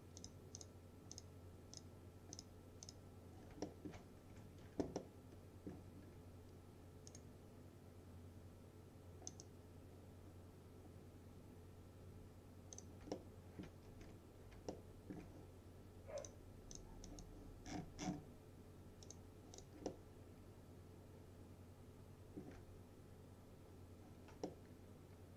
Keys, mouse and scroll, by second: 3.7 alt+middle click, 4.4 F4, 5.0-6.0 alt+middle drag, 7.2 right click, 9.3 click, 12.8 click, 13.2-13.8 alt+middle click, 14.1 F4, 14.8-15.4 alt+middle drag, 16.2 click, 17.7-18.8 scroll down 1, 19.1 click, 19.9-22.7 alt+middle drag, 24.8-25.3 alt+middle drag.